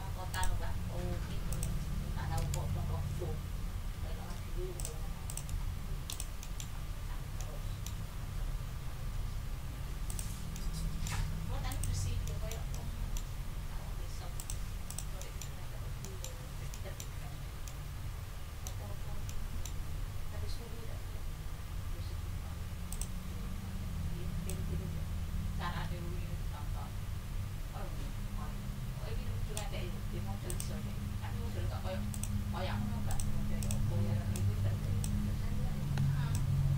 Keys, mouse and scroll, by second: 0.3 click, 1.5 shift+click, 2.8 ctrl+shift+z, 4.7 middle click, 5.2 ctrl+middle click, 5.5-5.8 ctrl+scroll down 2, 6.1 ctrl+middle click, 6.4 ctrl+middle click, 6.7-7.2 ctrl+scroll up 2, 7.3 ctrl+middle click, 8.0 ctrl+scroll down 2, 8.9-9.4 ctrl+scroll up 4, 10.6 middle click, 10.8 middle click, 11.1 click, 11.4 d, 11.7 middle click, 12.3 click, 12.8 click, 13.1 scroll up 2, 14.4 click, 14.9 click, 15.5 ctrl+scroll down 2, 16.0 ctrl+middle click, 16.3 ctrl+scroll down 2, 16.7 ctrl+middle click, 17.6-18.8 ctrl+middle drag, 19.2 ctrl+click, 22.9 click, 24.5-29.7 ctrl+drag, 30.5 click, 31.8 d, 32.1 click, 33.1 click, 33.6 click, 34.3 click, 35.8 ctrl+d, 36.3-36.7 ctrl+drag.